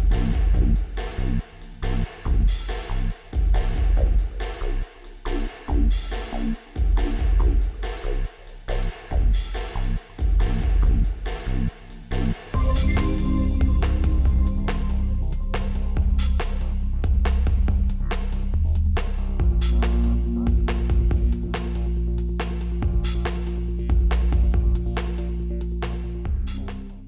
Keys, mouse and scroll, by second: 6.1-15.9 drag, 17.4-24.4 drag.